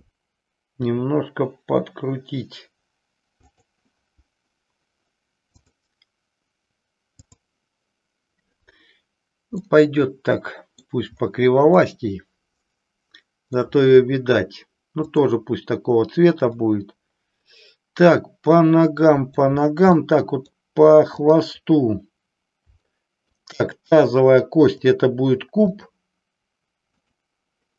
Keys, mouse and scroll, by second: 0.6 r, 3.4 click, 5.5 click, 9.6-10.9 middle drag, 11.8-13.6 middle drag, 15.0 click, 16.5-19.5 middle drag, 20.0 middle click, 21.1-22.5 drag, 22.9 shift+middle click, 24.7-25.9 drag, 27.0 click.